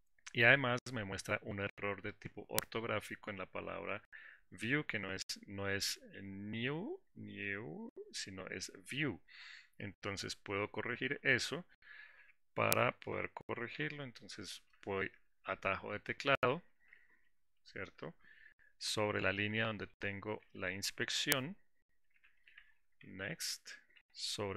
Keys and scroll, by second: 14.2 alt+6.